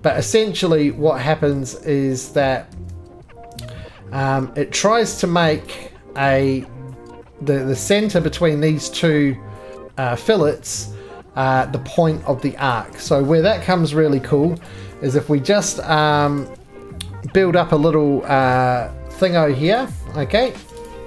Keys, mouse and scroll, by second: 0.3-0.8 scroll, 1.5-3.3 middle click, 2.7 ctrl+z, 5.6 click, 16.8 Escape, 16.8 click, 16.8 x, 18.5 click, 19.8 click, 20.5 click, 20.7 right click, 20.7 3, 20.9 click.